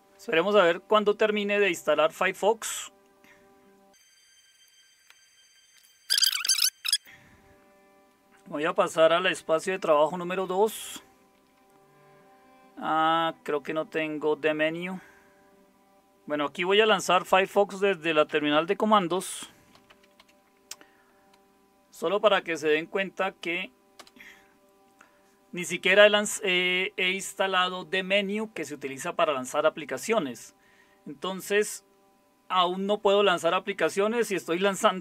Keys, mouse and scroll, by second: 9.9 super+9, 15.9 super+0, 17.1-20.7 typing, 24.0 Return.